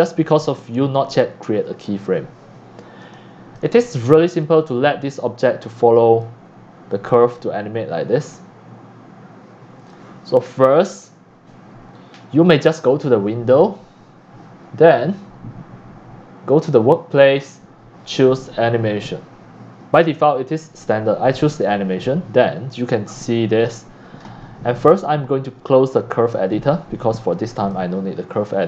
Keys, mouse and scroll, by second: 0.5 click, 1.4 click, 1.5-1.8 scroll, 1.7 click, 3.0 x, 3.2 click, 3.5 click, 3.7 c, 3.9 click, 6.2-9.9 drag, 10.4-12.7 drag, 12.8 click, 16.5 click, 21.5 click, 25.2-26.8 drag, 27.6 click, 27.8 click.